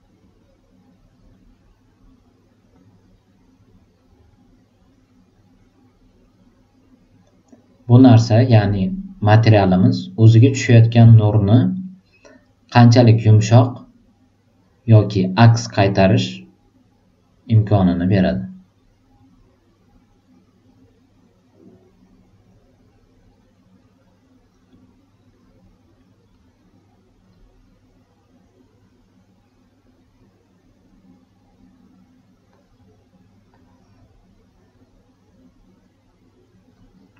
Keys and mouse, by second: 2.6-9.0 drag, 17.5-23.9 drag, 33.4-35.1 drag.